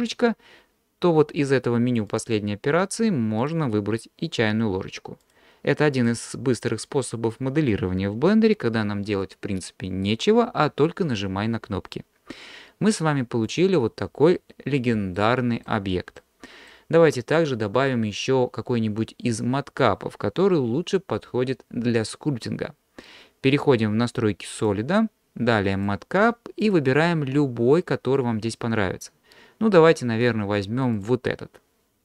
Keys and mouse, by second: 2.1-3.5 drag, 5.2-6.1 drag, 13.5 click, 15.2-15.7 shift+middle drag, 16.2-16.7 middle drag, 24.6-32.0 drag.